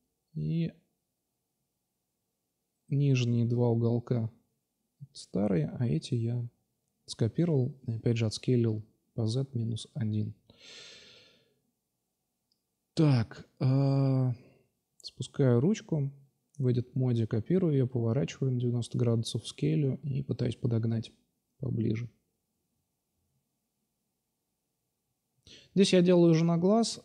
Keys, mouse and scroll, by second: 0.8-1.5 drag, 1.7 right click, 2.5-2.9 drag, 2.9 x, 4.4-4.9 drag, 7.0 click, 8.0 shift+d, 8.7 g, 11.1 alt+F5, 15.1 Tab, 16.2 shift+d, 16.8 r, 18.2-18.9 drag, 18.9 s, 20.5-21.0 middle drag, 21.8 s, 23.5 s, 24.6 click, 25.7-26.5 drag, 26.9 s.